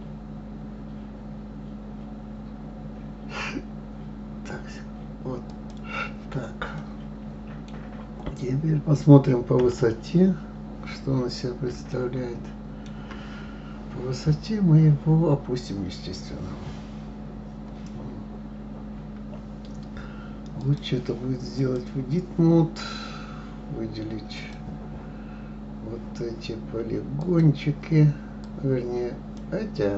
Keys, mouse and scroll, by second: 6.8-9.6 middle drag, 9.6 KP_3, 11.9-14.9 shift+middle drag, 20.6-23.6 drag, 24.3 click, 27.2 click, 28.4 click.